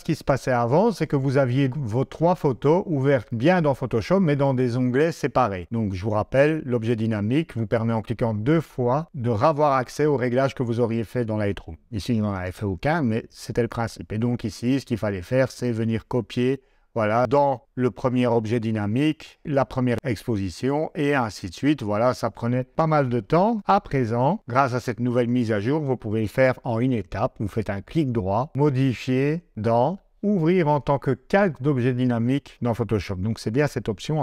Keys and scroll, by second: 23.6 super+Tab.